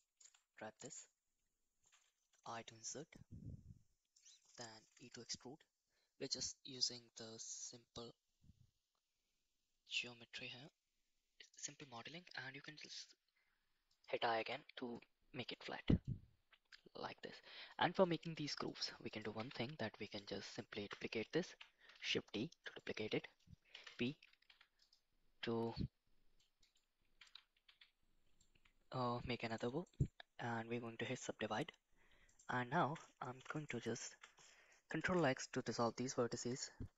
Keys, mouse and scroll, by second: 0.2 Tab, 0.9 click, 2.4 i, 5.0 e, 14.4 Tab, 14.9-15.5 middle drag, 16.0-16.7 middle drag, 17.7 middle click, 18.6 middle click, 19.1 click, 19.3 Tab, 20.1 click, 21.5 shift+f, 21.9 shift+d, 23.7 p, 24.4 Tab, 24.8 click, 25.6 middle click, 26.6 right click, 27.6 a, 28.4-29.5 middle drag, 29.8-31.1 right drag, 33.3 2, 33.5 click, 35.0 ctrl+x, 35.4 middle click, 36.3 2, 36.8 3, 36.8 4.